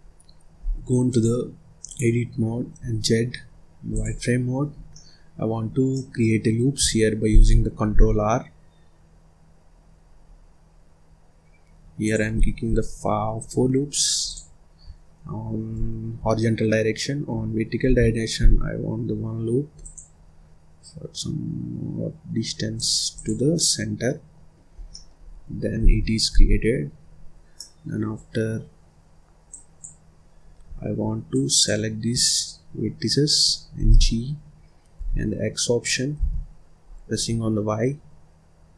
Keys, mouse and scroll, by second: 0.9-2.7 drag, 2.7 z, 4.7 scroll down 3, 4.8 middle click, 5.6 scroll up 1, 5.8-7.2 middle drag, 7.2 ctrl+r, 14.1 click, 17.7 ctrl+r, 23.0 click, 23.4-24.4 middle drag, 24.4-24.8 scroll down 2, 24.8 middle click, 25.1-25.8 scroll up 2, 25.8 ctrl+s, 26.3 scroll down 3, 26.5-27.5 scroll up 3, 27.5-29.4 middle drag, 29.4 click, 31.2 shift+click, 33.8 g.